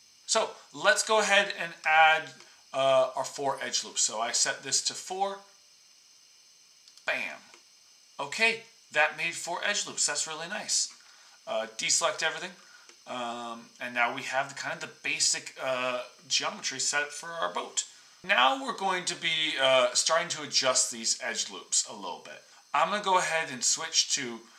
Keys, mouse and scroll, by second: 0.2 ctrl+z, 11.1 Tab, 12.2 middle click, 13.0 click.